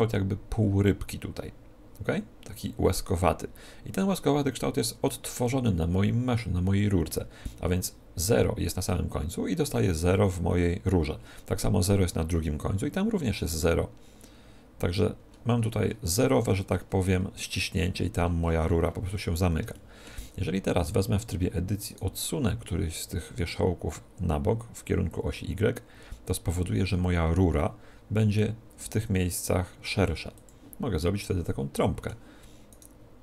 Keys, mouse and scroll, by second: 14.8-21.5 middle drag, 20.6 Tab, 21.8-23.8 right drag, 23.4-25.2 drag, 28.6 r, 30.4-32.2 drag, 32.1 middle click, 32.6-33.2 right drag.